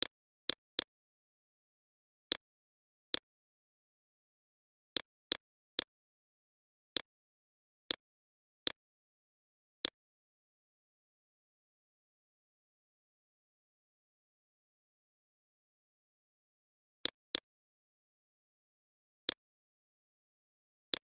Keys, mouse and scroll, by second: 0.6-15.0 alt+shift+drag, 16.1 right click, 16.6-21.1 drag.